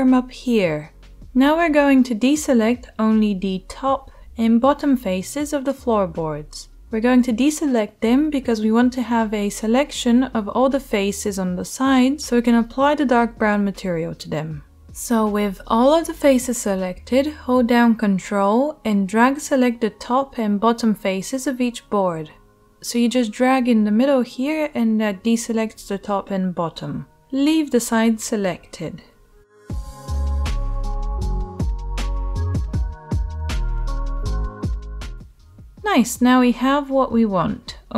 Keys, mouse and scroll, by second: 0.5-37.9 middle drag, 24.4 ctrl+z, 24.5 ctrl+z, 29.0 ctrl+z, 29.1 ctrl+z.